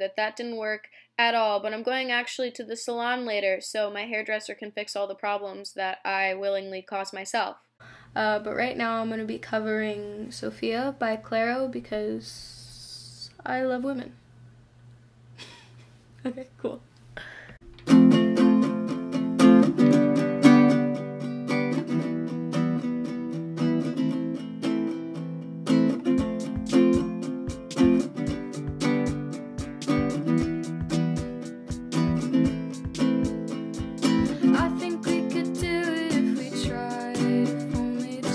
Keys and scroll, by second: 22.8-23.6 typing.